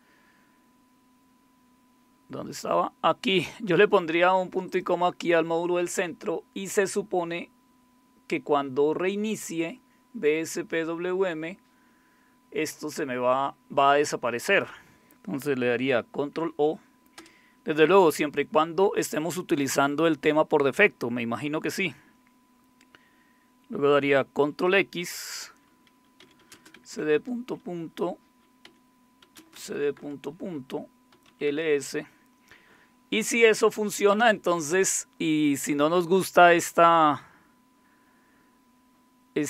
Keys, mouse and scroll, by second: 1.8-4.7 scroll down 1, 4.7 click, 14.5 click, 16.4 ctrl+o, 17.2 Return, 24.7 ctrl+x, 25.9-32.0 typing, 33.6-34.3 typing.